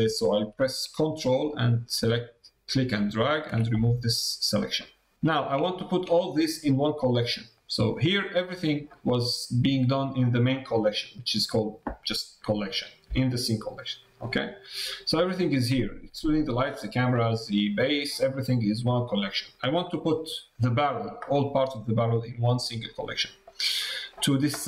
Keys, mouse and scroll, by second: 1.4-3.1 ctrl+drag, 3.8 middle click, 4.7 middle click, 5.6 shift+middle click, 7.6 click, 14.2 click, 21.3 middle click, 22.7 middle click.